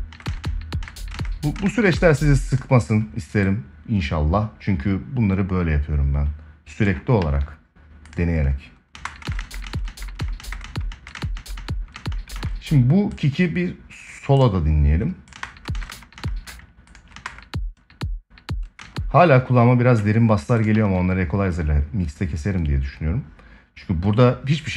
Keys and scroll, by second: 6.9 ctrl+s, 8.6 space, 15.0 space, 16.8 space, 18.5 space, 20.5 ctrl+s.